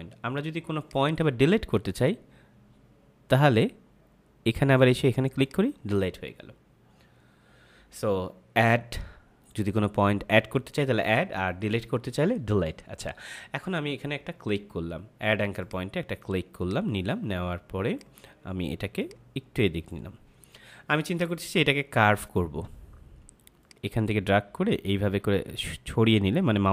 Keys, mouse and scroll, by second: 0.7 click, 5.4 click, 15.5 click.